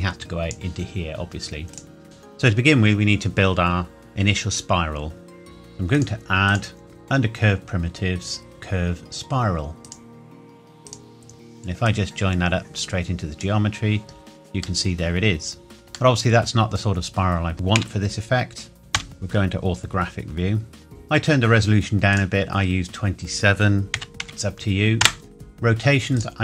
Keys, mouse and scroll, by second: 2.0 middle click, 5.4-6.0 scroll up 1, 6.0 click, 9.8 click, 14.1 scroll up 1, 14.3 scroll down 1, 14.8 middle click, 17.2 scroll down 1, 17.8 KP_1, 19.0 KP_5, 20.4-20.8 scroll up 1, 22.1 click, 24.0 KP_2, 24.2 KP_7, 25.0 KP_Enter, 26.2 click.